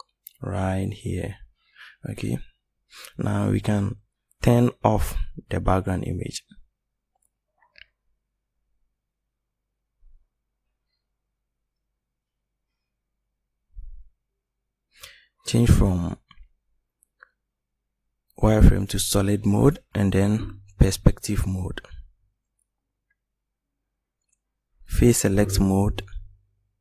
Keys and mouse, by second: 13.7-15.7 middle drag, 16.9-17.7 drag, 21.3-23.7 middle drag, 25.9 middle click.